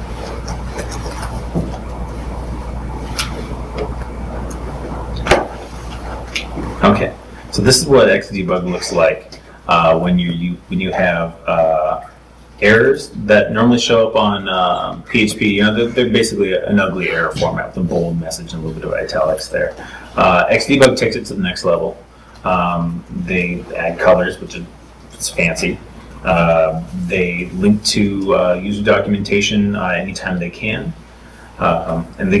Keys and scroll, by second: 0.8 super+Tab, 1.3 super+Tab, 9.2 super+Tab, 9.7 super+Tab.